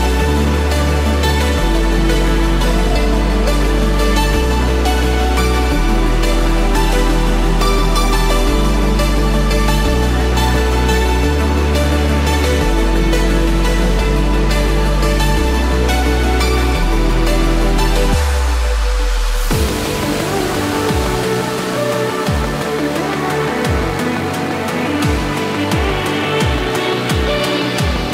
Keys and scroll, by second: 27.6 ctrl+-.